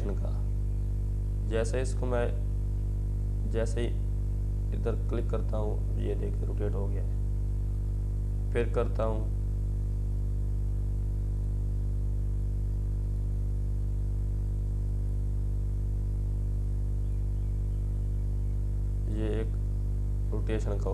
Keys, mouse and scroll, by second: 19.9 ctrl+t, 20.7-20.9 drag.